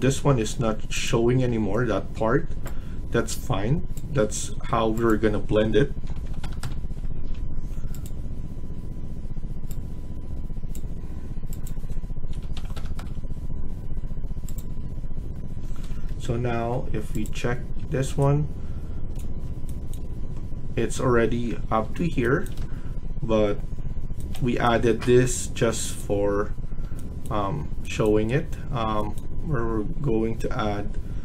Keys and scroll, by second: 0.1 Escape, 5.7-6.8 typing, 7.0 Escape, 7.2 Escape, 12.2-13.1 typing, 15.6 Escape, 15.8 Escape, 15.8 typing, 17.8 Escape.